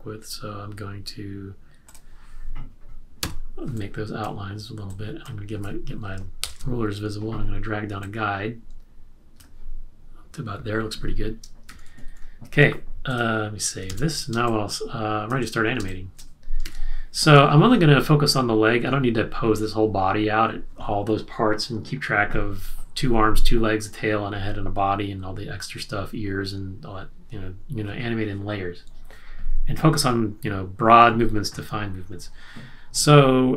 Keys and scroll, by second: 3.2 z, 6.4 alt+shift+super+r, 11.6 super+-, 13.9 super+s, 14.4 space, 15.9 space, 16.6 space, 16.6 super+-.